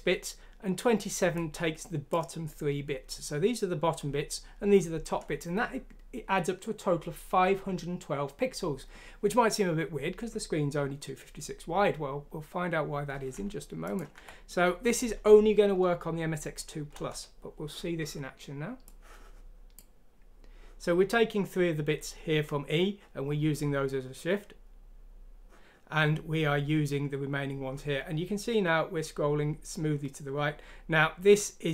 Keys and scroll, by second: 14.1 F6, 16.9 Return.